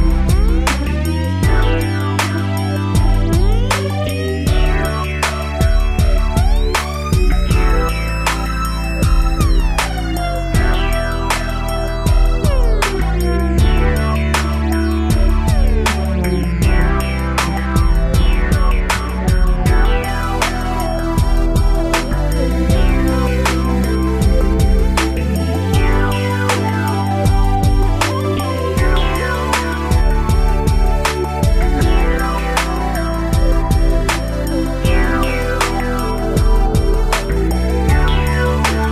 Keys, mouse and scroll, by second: 0.0 shift+space, 1.3 Escape, 1.8 ctrl+s, 1.9 scroll down 2, 2.2 middle click, 2.4 middle click, 2.6 shift+space, 4.1 Escape, 4.7 shift+space, 6.2 Escape, 6.7 shift+space, 8.0 Escape, 9.9 click, 13.7 click, 14.8 click, 24.0 middle click, 24.4 scroll up 3, 25.0 shift+middle click, 25.3 scroll up 1, 26.1 click, 26.2 click, 29.1 click, 35.1 scroll down 1, 35.5 shift+middle click, 37.1 shift+click.